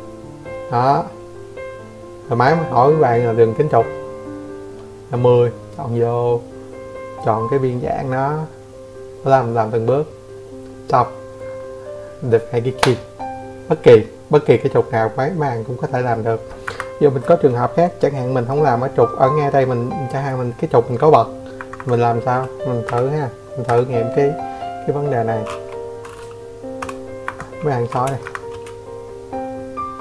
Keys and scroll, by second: 8.7 Escape, 13.6 Escape, 13.9 Escape, 15.0 Delete, 15.7 Delete, 18.9 n, 19.3 Escape, 19.9 e, 20.1 space, 20.4 Escape, 20.6 space, 22.5 Escape, 22.7 Escape, 22.9 space.